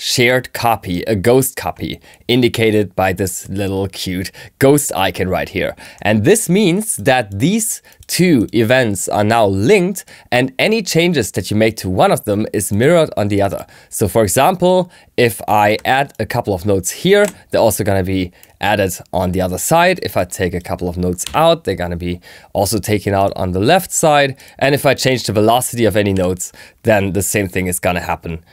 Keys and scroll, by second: 21.2 BackSpace.